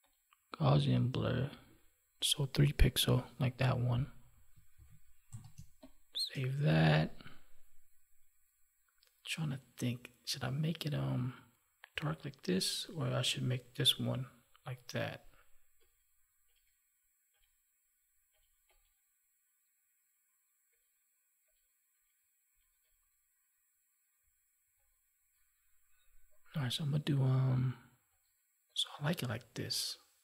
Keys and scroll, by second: 4.7 ctrl+s, 5.5 space.